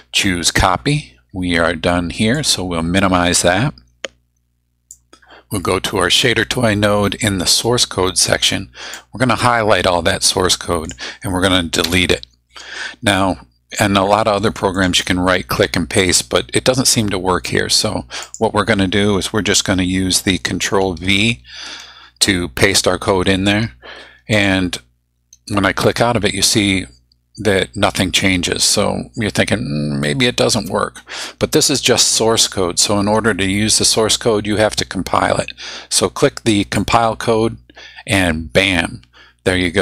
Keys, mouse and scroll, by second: 2.4 click, 4.9-6.4 drag, 8.9-11.1 drag, 11.8 BackSpace, 14.8 right click, 18.2 click, 21.6 ctrl+v, 24.3 click, 36.8 click.